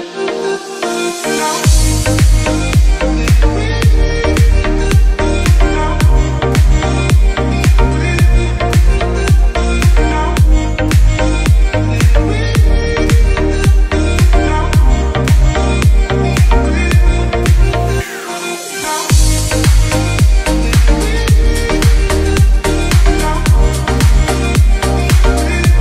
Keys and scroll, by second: 2.5 F9, 3.5 F10, 16.6 space, 24.9 space, 25.6 ctrl+q.